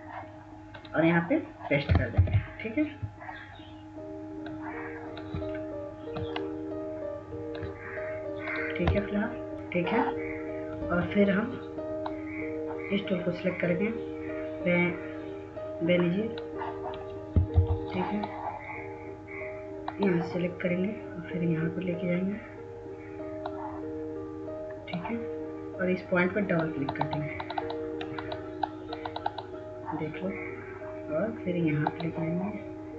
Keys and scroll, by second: 2.7 ctrl+v, 9.5 Delete, 18.2 F2.